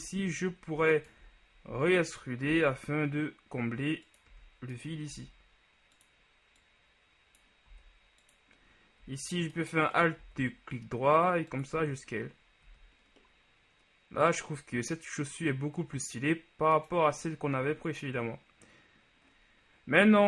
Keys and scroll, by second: 0.4 Tab, 1.8 e, 2.6 s, 4.5 e, 5.3 s, 7.9 s, 10.3 alt+s, 11.9 Tab, 12.8 a.